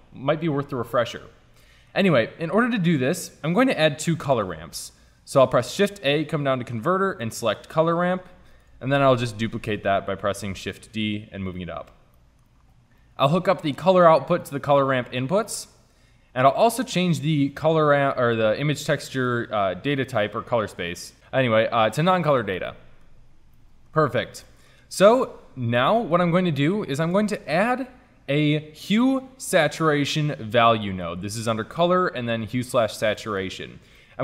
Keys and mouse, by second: 1.7 click, 2.6-4.0 drag, 4.2 shift+a, 10.3 shift+d, 20.9 click, 22.6-24.7 middle drag, 27.1 shift+a, 31.3 shift+a.